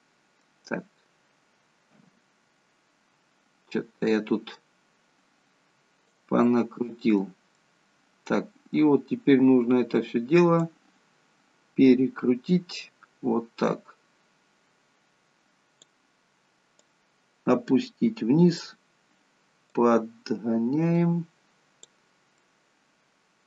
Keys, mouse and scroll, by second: 1.9 KP_7, 4.0 click, 6.4 middle click, 9.2-10.6 scroll down 3, 10.6 click, 16.9 click, 19.9 click, 22.4 middle click.